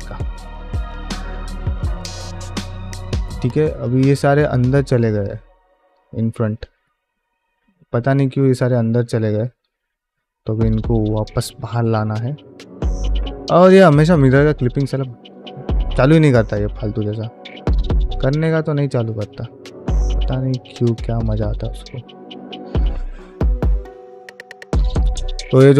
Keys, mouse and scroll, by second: 0.0 n, 0.4 ctrl+space, 0.7 ctrl+middle click, 1.0 shift+middle click, 1.8 click, 2.1 Tab, 2.6 shift+middle click, 3.0 middle click, 3.3 1, 3.7 alt+z, 4.3 alt+z, 4.4 q, 6.5 click, 6.7-9.6 typing, 7.3 click, 8.0 click, 8.5 middle click, 8.9 click, 9.5 click, 11.7 ctrl+space, 12.6 click, 13.4 click, 14.3 click, 14.8 ctrl+space, 15.1 shift+middle click, 15.4-19.1 typing, 16.1 click, 16.6 middle click, 16.9 click, 17.5 click, 18.1 click, 18.9 click, 19.4 shift+middle click, 19.7 middle click, 20.1 click, 20.3 g, 20.8 click, 20.9 g, 21.4 click, 21.6 g, 22.7 click, 22.8 g, 23.3 click, 23.5 g, 24.2 click, 24.3 g, 25.3 middle click.